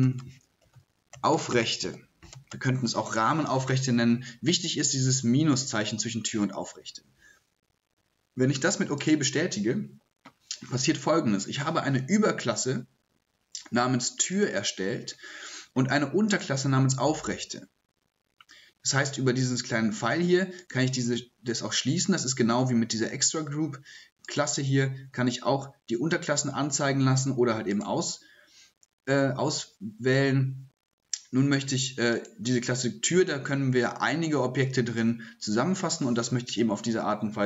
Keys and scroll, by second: 0.0-3.0 typing.